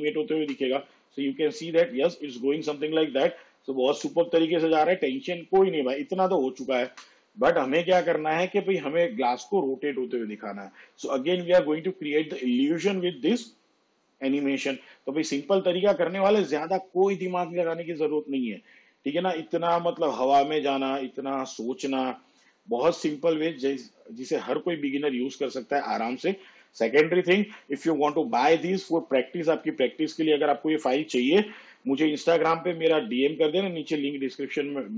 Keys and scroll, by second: 0.5 space, 7.0 space.